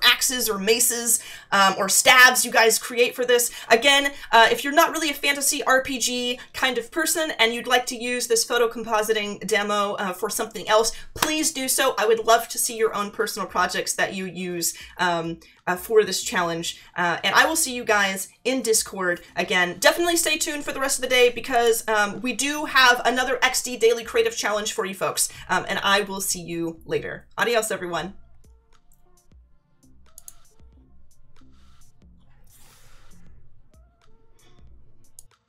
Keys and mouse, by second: 21.5 click.